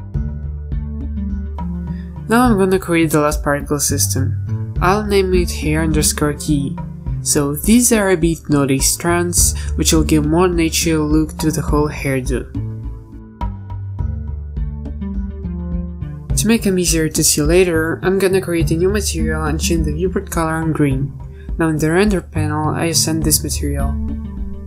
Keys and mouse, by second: 0.0-0.9 typing, 1.4 ctrl+s, 14.5-14.8 drag, 14.8 a, 16.5 f, 19.5 click.